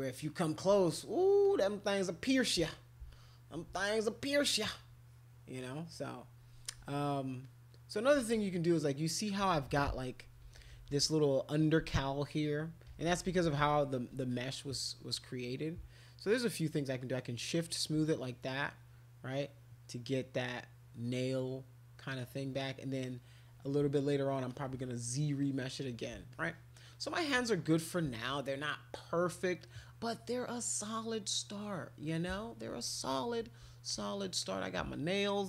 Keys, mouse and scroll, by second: 0.6 alt+click, 1.4-2.7 drag, 3.1 alt+click, 4.5-6.4 drag, 6.6 alt+click, 7.4 click, 8.3 alt+click, 10.2-11.0 typing, 12.9-13.6 typing, 13.7 click, 14.8 click, 15.8 shift+click, 16.2 shift+click, 16.4 shift+click, 16.6 shift+click, 16.8 shift+click, 17.0 shift+click, 17.6 shift+click, 17.8 shift+click, 18.2-22.6 drag, 24.4 alt+click, 25.4 click, 26.3 alt+click, 26.9-28.0 drag, 28.2 alt+click, 29.6 click, 33.9 alt+click, 34.4 click.